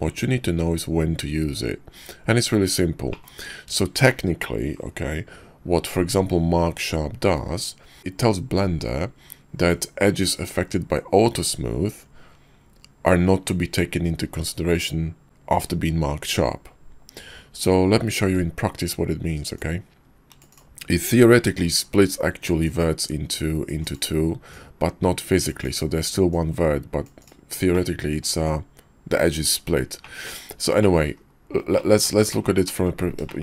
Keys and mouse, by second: 3.1 middle click, 4.0-4.4 shift+middle drag, 18.2 `, 19.5-20.6 drag, 21.4 ctrl+z, 21.8 KP_5, 22.6-23.9 drag, 24.8-25.7 drag, 26.3-27.3 drag, 27.7-28.2 middle drag, 30.0 drag, 30.6 shift+middle click, 31.1 KP_5, 31.7-32.1 middle drag, 32.3 shift+middle click, 32.6 middle click, 33.3 shift+middle click.